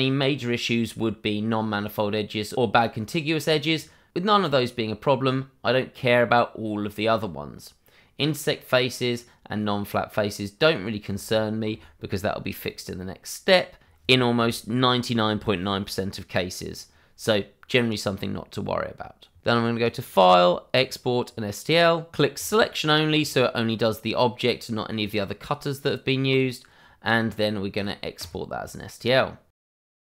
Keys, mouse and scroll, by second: 0.3-2.2 scroll up 1, 10.5 scroll up 1, 11.3 shift+middle click, 17.9 scroll down 1, 19.8 click, 28.2 double click.